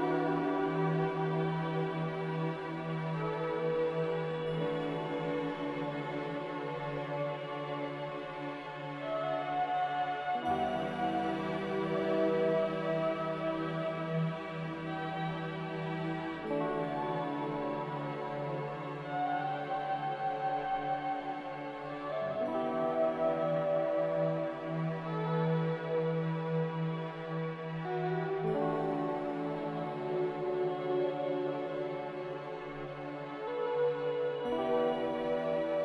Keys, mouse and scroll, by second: 4.8 2, 5.1 Return, 9.7 typing, 9.9 Return, 15.9 typing, 17.5-19.0 typing, 19.5 Return, 25.9 ctrl+c, 26.1 ctrl+v.